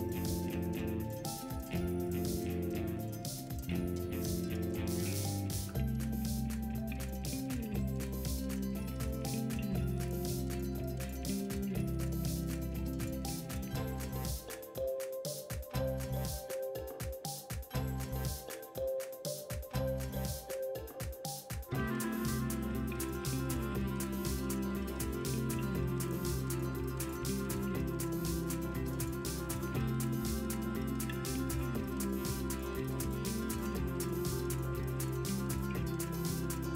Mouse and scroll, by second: 4.0 middle drag, 14.2 middle click, 16.1 middle drag.